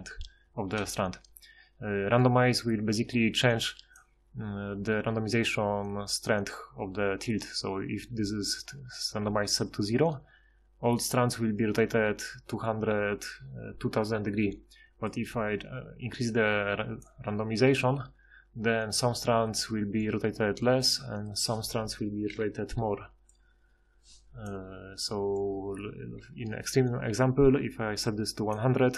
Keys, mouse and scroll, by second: 2.5 F6, 19.4-20.0 middle drag, 22.3 F6, 23.4 F6, 28.2 F6.